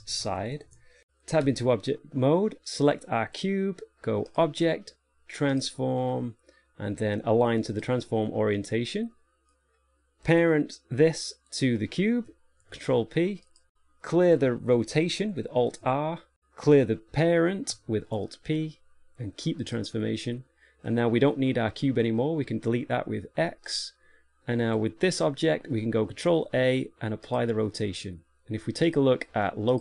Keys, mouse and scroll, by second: 1.8 Tab, 3.1 right click, 4.6 click, 8.9 middle click, 10.6 right click, 11.8 shift+right click, 12.9 ctrl+p, 13.8 right click, 15.9 alt+r, 16.7 right click, 18.4 alt+p, 21.3 right click, 23.7 x, 25.0 right click, 26.6 ctrl+a.